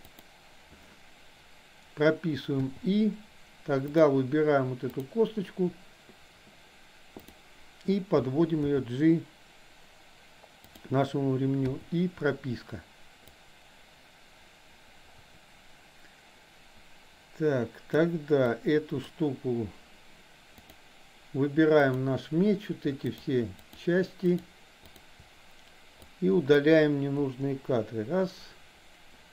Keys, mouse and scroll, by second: 2.7 i, 4.0 drag, 5.0 drag, 8.6 g, 11.7 i, 13.5-18.1 drag, 18.5-19.1 drag, 21.7 click, 23.2 shift+drag, 23.6 shift+click, 24.4 shift+drag, 24.9-25.2 shift+drag, 26.1-26.6 drag, 27.4 Delete.